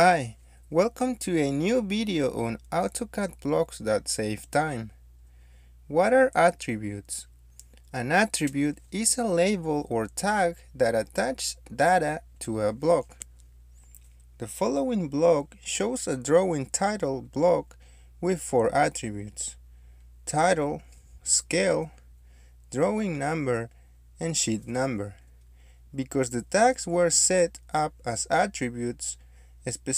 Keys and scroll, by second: 1.1 Escape, 1.6 typing, 2.7 Return, 6.4 Escape, 20.2-22.1 typing, 23.1 Return, 24.6 Escape.